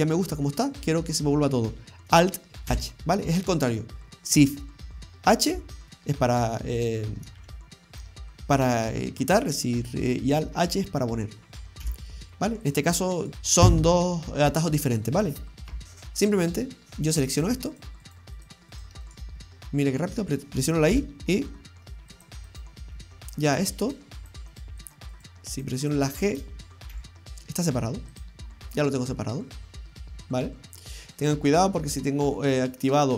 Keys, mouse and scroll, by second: 1.4-2.2 scroll up 1, 2.7 alt+h, 5.6 shift+h, 7.4 shift+h, 11.8 shift+h, 12.7 right click, 13.2 right click, 13.3-15.8 scroll up 3, 15.8 shift+middle click, 15.8-16.2 scroll down 2, 16.2-16.9 scroll down 3, 17.4 right click, 17.7 shift+right click, 18.1 shift+right click, 18.4 shift+right click, 18.7 shift+right click, 19.1 shift+right click, 19.4 scroll down 1, 19.7 middle click, 20.9 y, 22.1 click, 22.5 right click, 22.9 scroll down 1, 23.4 right click, 23.9 right click, 24.2 shift+right click, 24.6 shift+right click, 24.9 shift+right click, 25.4 right click, 25.6 shift+right click, 25.9 shift+right click, 26.1 shift+right click, 26.9 g, 28.9 middle click, 32.6 click.